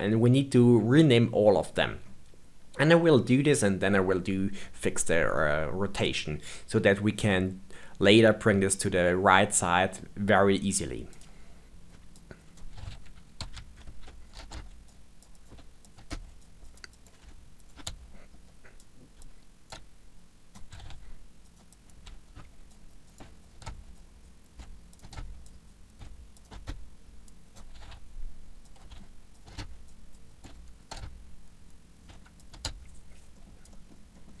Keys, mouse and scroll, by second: 2.4-5.3 scroll up 1, 5.3-8.4 middle drag, 11.1 click, 11.8 click, 14.3 BackSpace, 14.3 BackSpace, 15.1 click, 16.3 click, 16.6 click, 18.1 middle click, 18.4 click, 18.7 click, 20.8 d, 22.6 click, 22.8 click, 24.2 click, 25.4 click, 25.6 click, 27.2 click, 29.4 BackSpace, 30.1 click, 30.9 BackSpace, 31.4 click, 31.6 click, 33.3 middle click, 33.6 click, 33.7 middle click, 33.9-34.4 scroll up 3, 34.1 middle click.